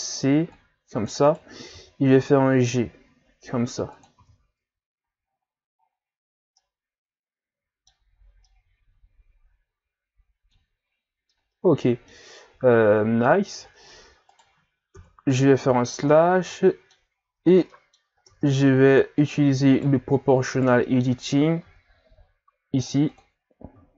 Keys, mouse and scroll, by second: 1.7 g, 4.3 z, 4.6 Tab, 5.1 a, 5.2-6.6 scroll down 8, 6.6-8.1 middle drag, 8.1-8.5 scroll down 1, 8.5-12.7 middle drag, 12.7-13.2 shift+scroll down 3, 13.2-13.9 scroll up 1, 14.3 right click, 15.0 KP_Divide, 15.8 scroll down 3, 16.1-17.2 middle drag, 17.2 scroll up 1, 17.4 Tab, 17.7-18.2 middle drag, 18.2 ctrl+Tab, 19.2 right click, 19.7 shift+right click, 20.6 shift+right click, 21.6 o, 22.8 click, 23.1 click.